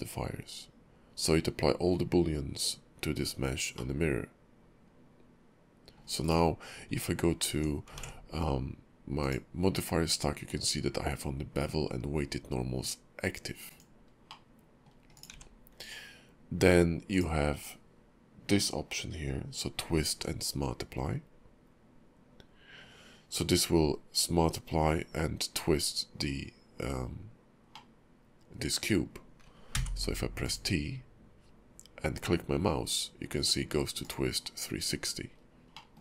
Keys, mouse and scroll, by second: 3.7 middle click, 6.9 Tab, 7.5 Tab, 8.0 ctrl+`, 14.3 middle click, 15.1 click, 15.3 q, 27.7 middle click, 35.3-35.7 scroll down 3, 35.7 middle click.